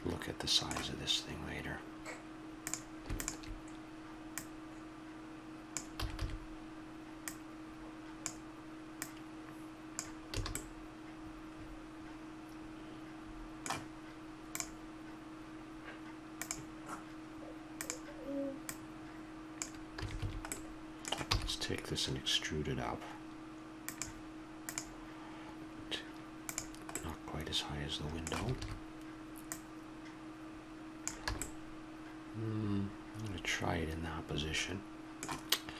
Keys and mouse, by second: 2.6-6.0 drag, 6.0 a, 6.3 a, 7.2-10.5 drag, 10.3 a, 10.5 middle click, 10.7 click, 12.0 middle click, 17.7-20.4 drag, 20.0 a, 20.2 a, 21.3 e, 28.3 a, 28.5 a, 29.5-31.4 drag, 31.3 a, 31.4-32.6 middle drag, 32.6 click, 33.8 middle click, 34.0 middle click, 34.8 middle click.